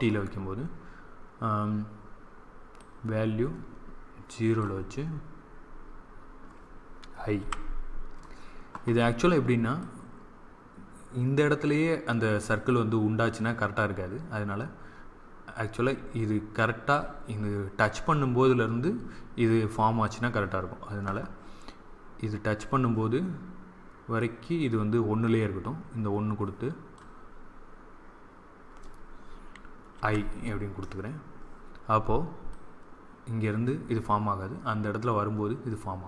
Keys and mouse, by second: 2.7-4.6 drag, 7.3 i, 9.5 click, 9.7-11.6 drag, 24.0-26.1 drag, 29.8 i, 32.4-34.4 drag.